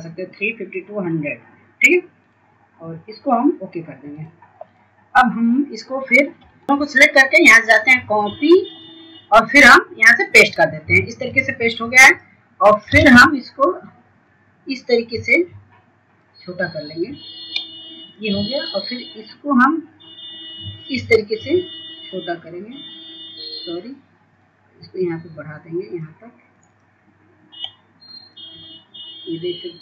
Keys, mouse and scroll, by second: 8.7 shift+click, 15.3 ctrl+space, 16.5-25.5 drag, 25.6 scroll up 1, 26.8-29.8 drag.